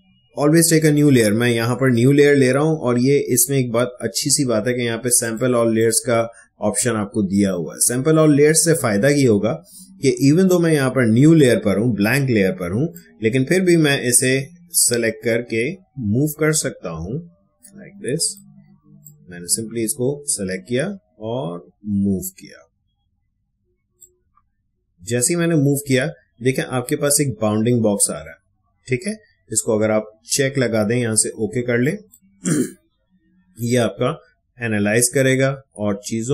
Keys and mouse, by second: 1.9 click, 5.2 click, 12.9-26.4 drag, 31.8 click.